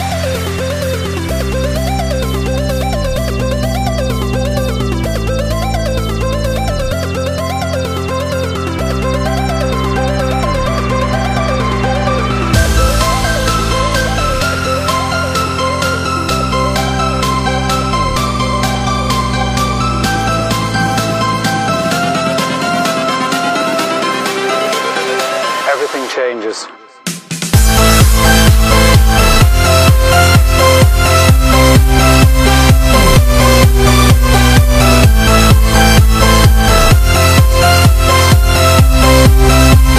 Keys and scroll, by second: 32.8 super+=, 33.0 super+=, 33.2 super+=.